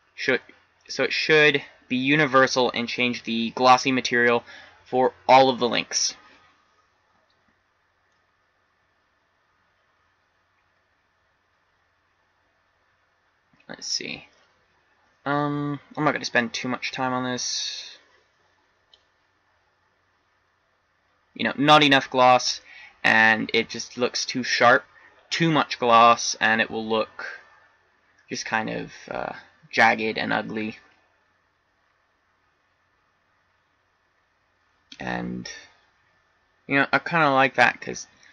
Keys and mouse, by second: 3.4-7.1 middle drag, 8.7-10.7 middle drag.